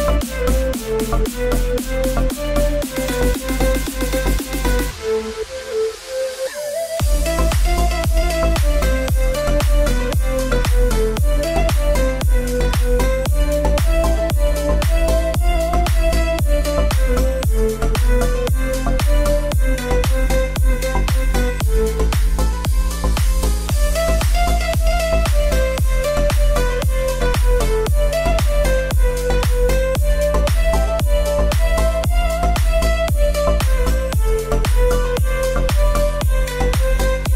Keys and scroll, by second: 24.7-27.3 typing.